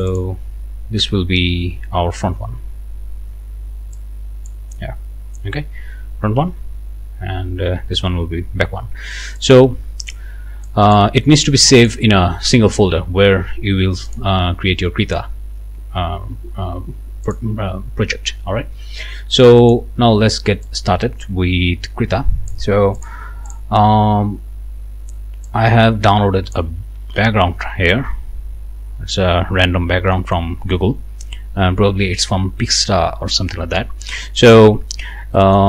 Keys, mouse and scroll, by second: 4.0 click, 4.6 click, 5.0-5.4 scroll down 2, 6.4 BackSpace, 7.5-8.0 scroll down 2, 9.4 click, 10.6 click, 11.8 click, 14.1 click, 17.3-18.5 drag, 19.6 click, 20.6-22.7 drag, 22.9 click, 23.5-26.7 drag, 28.7-29.2 scroll down 1, 29.3-29.9 scroll up 2, 30.1 click, 34.8 scroll down 2, 35.3 middle click.